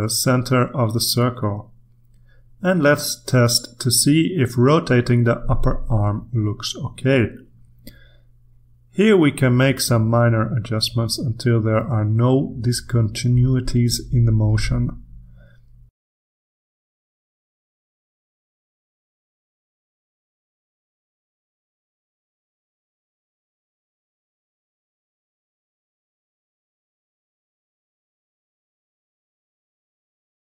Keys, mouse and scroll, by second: 1.2 click, 2.4-7.5 drag, 8.3 click, 9.9-11.7 drag, 12.1-14.1 drag, 13.5 right click, 15.0 click, 16.2-17.2 drag, 17.5 click, 18.0 click, 19.5 click, 20.1-23.7 drag, 23.9 click, 25.8 click, 27.4 click, 28.0 click, 29.2 click, 29.5 click, 29.8-30.5 drag.